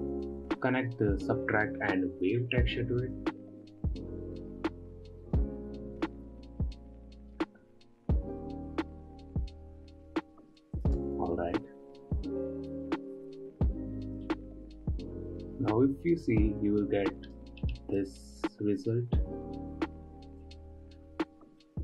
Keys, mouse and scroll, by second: 0.3-1.0 scroll up 6, 1.8 click, 7.0 click, 11.4 ctrl+shift+click, 14.8-21.5 middle drag.